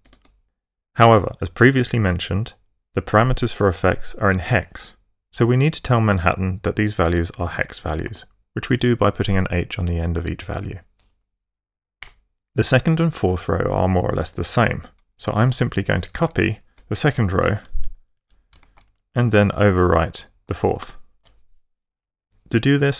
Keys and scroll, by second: 0.0-0.4 typing, 5.2 Left, 6.9 h, 7.2 Right, 7.9 h, 11.8 Return, 16.0 shift+Right, 17.3 super+c, 17.7 Down, 20.6 alt+super+v.